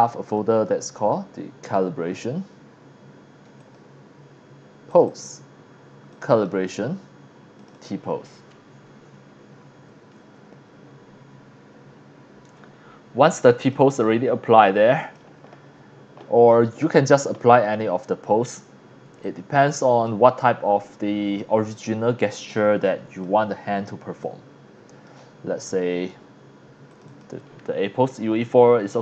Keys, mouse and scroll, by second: 0.3 click, 3.6 click, 4.9 click, 6.1 click, 6.3 click, 7.6 click, 12.5-13.0 scroll down 2, 13.1 x, 13.2-13.7 drag, 13.9-15.1 drag, 19.1 x, 19.2-20.0 drag, 19.5 c, 20.3 scroll down 1, 20.4 scroll up 1, 22.6-23.2 drag, 24.2-25.1 drag, 26.9 click, 27.1 click.